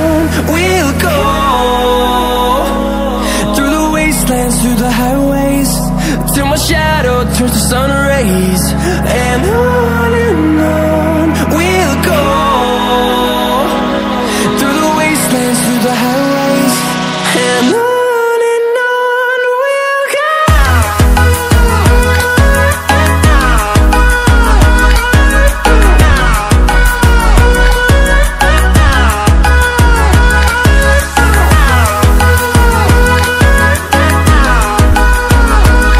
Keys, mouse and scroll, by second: 0.4 click, 2.9 Delete, 4.1-8.2 drag, 8.5-10.7 drag, 10.7 ctrl+w, 13.7 ctrl+w, 14.9-15.3 scroll down 1, 15.3 click, 16.9-18.0 typing, 18.3 click, 34.7-35.9 drag.